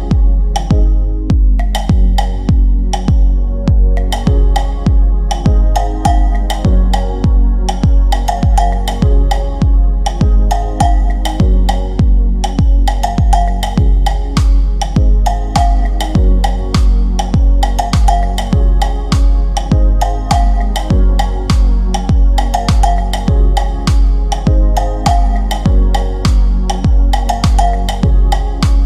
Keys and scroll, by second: 17.4 ctrl+g, 22.1 shift+F2, 22.8 F9, 26.4 F3, 26.9 Escape.